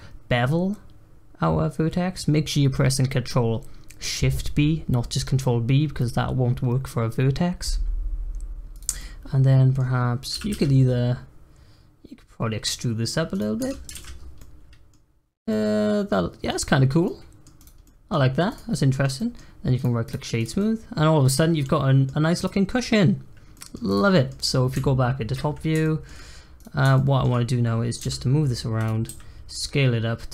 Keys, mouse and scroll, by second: 8.9-10.3 middle drag, 10.3 e, 13.6 Tab, 13.9 alt+z, 14.1 scroll down 1, 14.3-15.1 middle drag, 15.1-15.5 scroll up 1, 15.5-16.5 middle drag, 16.5-17.0 scroll down 3, 17.0-17.5 middle drag, 17.5 click, 17.8-18.2 middle drag, 18.2 scroll up 1, 18.5 click, 18.7-19.4 middle drag, 19.4-19.7 scroll up 1, 19.7-20.3 right drag, 20.3 click, 20.5-21.3 middle drag, 21.3 scroll down 3, 21.6-22.3 middle drag, 22.3 click, 23.5-23.8 middle drag, 23.8 drag, 24.1-24.7 middle drag, 24.7 `, 25.8-26.2 shift+middle drag, 26.2 scroll up 1, 26.5 click, 26.9-28.0 shift+middle drag, 28.0 g, 29.1 s.